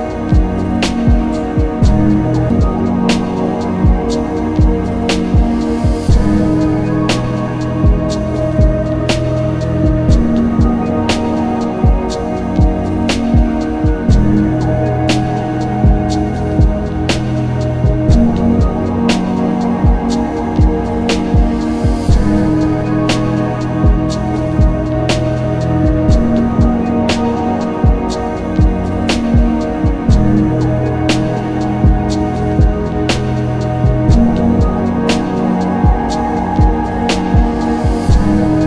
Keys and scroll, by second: 0.6 ctrl+z, 2.2 ctrl+z, 3.9 z, 5.2 z, 5.9 z, 7.4 z, 8.5 ctrl+z, 11.6 ctrl+z, 14.4 s, 24.5 ctrl+s, 37.2 ctrl+alt+z.